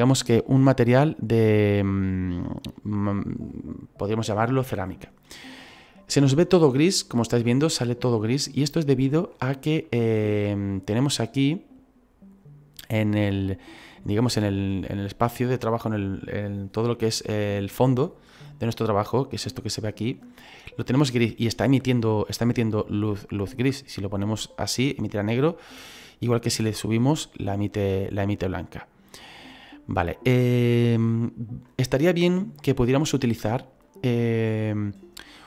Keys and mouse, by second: 2.0 middle click, 11.4 click, 23.3 click.